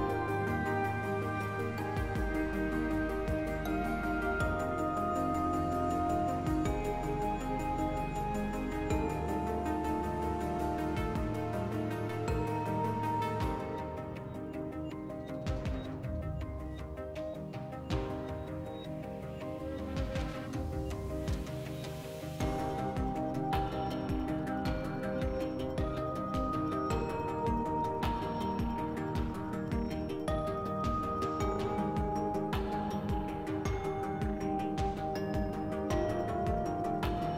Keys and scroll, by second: 1.4 s, 2.4 2, 4.7 4, 7.0 2, 18.4 s, 21.0 s, 23.0 s, 24.1 s, 28.0-28.8 typing, 33.0-34.4 typing, 35.5 2, 36.8-37.3 typing.